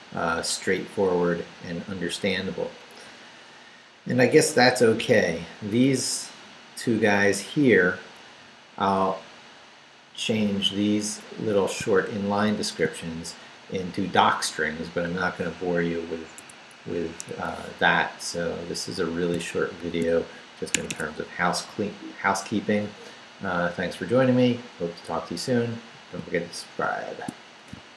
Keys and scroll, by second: 1.5 Down, 2.1 Down, 3.0 Down, 5.1 Up, 5.8 Down, 6.4 Down, 7.0 Down, 7.5 Down, 8.1 Up, 8.7 Up, 12.4 shift+v, 16.0 Down, 16.3 Escape, 16.7 Up, 17.4 Down, 18.0 Down, 19.7 shift+v, 20.7 shift+Escape.